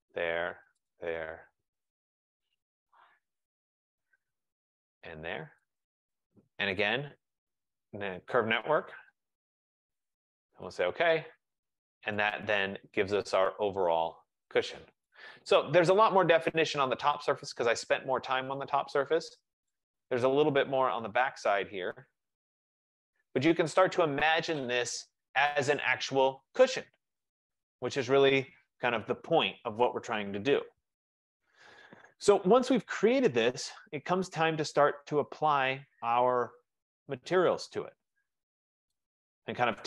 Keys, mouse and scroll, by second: 1.0 click, 2.8 click, 4.6 click, 5.8 shift+click, 7.6-8.5 typing, 10.3 F15, 10.8 click, 11.9 click, 15.1 right click, 15.4 middle click, 15.5 middle click, 16.7 right click, 17.6 middle click, 17.8 middle click, 20.1 right click, 21.0 middle click, 21.3 middle click, 23.6 right click, 23.9 middle click, 24.0 middle click.